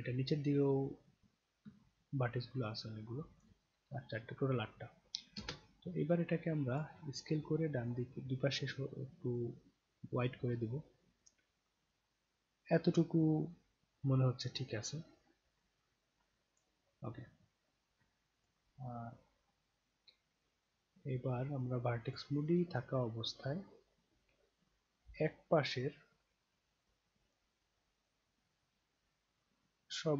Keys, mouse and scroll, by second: 0.5 scroll down 2, 1.4 scroll up 2, 1.9-3.4 alt+drag, 5.4 space, 6.7 click, 7.9-16.6 drag, 18.4 click, 22.1 click, 24.7-27.4 drag, 28.1-29.9 shift+drag.